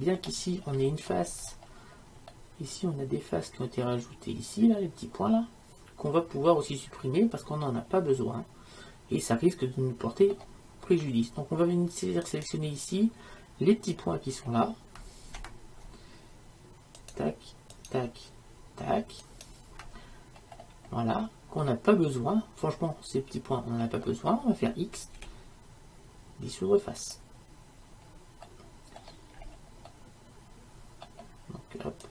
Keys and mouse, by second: 0.7-7.1 middle drag, 12.3-14.1 right drag, 14.1-17.1 middle drag, 17.1-21.7 right drag, 21.7-25.2 middle drag, 25.2 x, 28.5-32.1 middle drag.